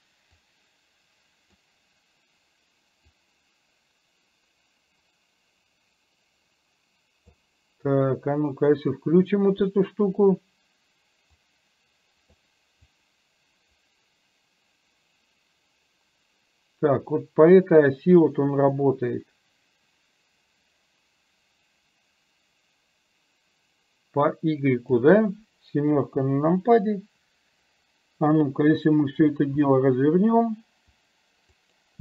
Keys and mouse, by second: 1.0-2.4 drag, 3.4-7.3 drag, 9.0 click, 11.6 click, 13.0-25.1 drag, 26.0 KP_7.